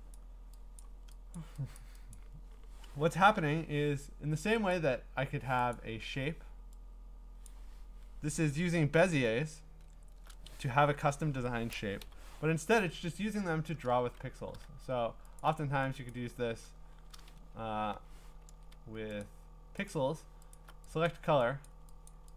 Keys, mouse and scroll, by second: 0.1 click, 0.8 click, 1.4 click, 1.8 click, 2.1 click, 4.7 click, 5.7 click, 8.5-10.0 scroll, 12.0 Delete, 12.9-13.5 ctrl+scroll, 15.4 alt+click, 16.1 click, 17.4 Escape, 17.9 Escape, 18.5 ctrl+z, 19.2 click, 19.9 click, 20.5 alt+click, 21.1 click, 21.6 click, 22.1 click.